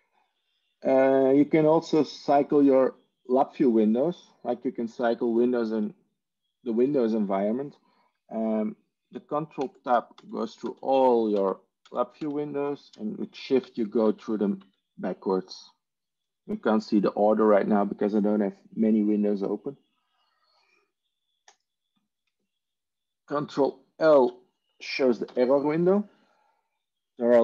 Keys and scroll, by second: 9.5 ctrl+Tab, 10.3 ctrl+Tab, 10.6 ctrl+Tab, 11.3 ctrl+Tab, 13.5 ctrl+shift+Tab, 14.1 ctrl+shift+Tab, 14.5 ctrl+shift+Tab, 25.1 ctrl+l.